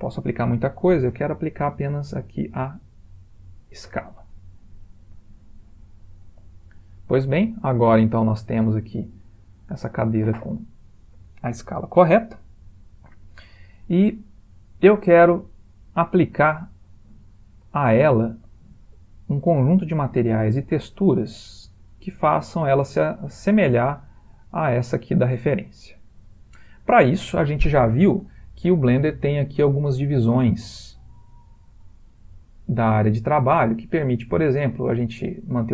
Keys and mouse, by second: 4.7 middle click, 4.8 middle click, 5.1 middle click, 9.2 middle click, 9.4 middle click, 9.8 middle click, 10.9 shift+middle click, 14.9 middle click, 16.2 middle click, 17.3 ctrl+middle click, 17.9 middle click, 21.6 middle click, 24.0-25.4 middle click, 25.2 middle click, 26.4 ctrl+middle click.